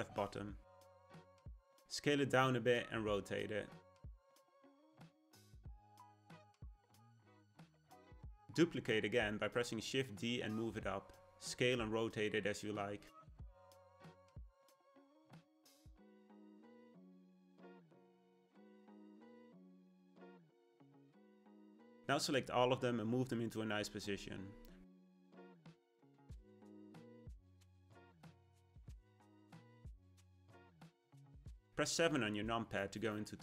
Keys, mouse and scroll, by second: 2.3 s, 3.7 r, 8.3 shift+d, 10.6 g, 13.3 r, 22.1 click, 23.4 g, 25.1 s, 26.0 g, 28.0 click, 29.9-31.7 middle drag, 31.7 KP_7, 33.0-33.4 middle drag.